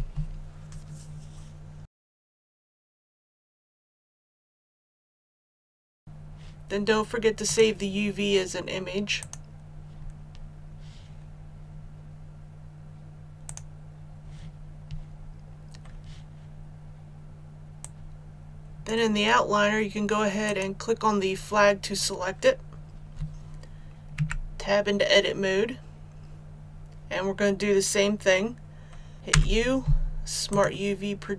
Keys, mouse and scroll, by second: 24.1 Tab, 29.1 click, 29.3 u, 30.5 click.